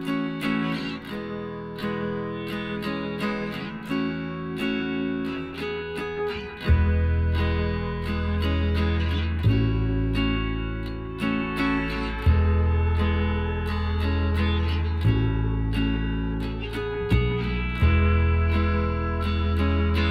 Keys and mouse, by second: 0.0-3.2 middle drag, 3.3-4.9 right drag, 5.1-8.3 middle drag, 7.0-8.6 right drag, 8.3 KP_Divide, 9.1-10.5 middle drag, 10.9 Tab, 13.6-15.0 middle drag, 15.0-16.7 right drag, 16.8-18.6 drag, 17.3-20.1 right drag.